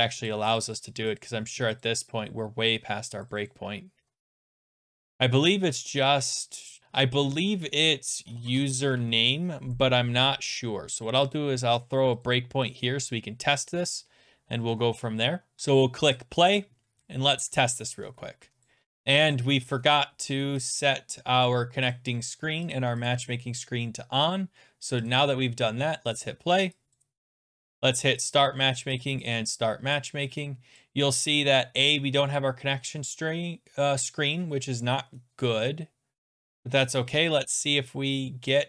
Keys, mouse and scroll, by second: 0.3 click, 0.6 click, 0.7 click, 1.2 click, 1.8 click, 3.3 click, 3.5 click, 4.1-5.5 scroll, 5.5-6.2 scroll, 6.8 click, 7.5-9.4 typing, 11.3 click, 11.8 click, 12.3 click, 12.7 click, 15.6 click, 16.2 click, 18.7 click, 19.8 click, 20.7 click, 21.9 click, 22.7 click, 23.1 click, 25.1 click, 26.9 click, 27.6 click, 28.3 click, 29.0 click, 29.3 click, 30.8 click.